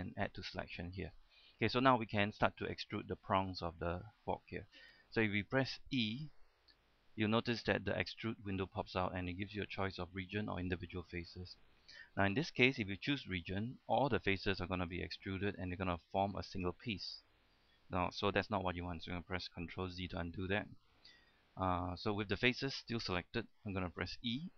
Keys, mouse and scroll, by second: 0.3 scroll down 1, 0.5 shift+middle click, 1.3-1.6 shift+scroll down 1, 1.6 shift+middle click, 2.1-2.4 scroll down 1, 2.4 shift+middle click, 3.0 shift+scroll up 1, 3.3 shift+middle click, 4.4-4.9 scroll up 1, 5.0 shift+middle click, 6.8 e, 13.5 click, 15.1-18.8 middle drag, 20.4 ctrl+z, 20.4-21.0 scroll up 1, 21.2-22.1 scroll down 1, 22.4-23.7 scroll up 1, 23.8 shift+middle click.